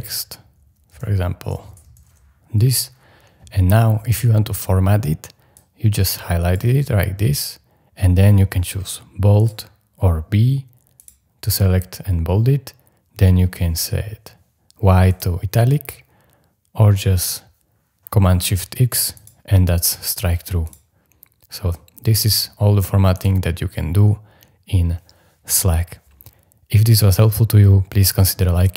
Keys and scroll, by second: 0.0-2.5 typing.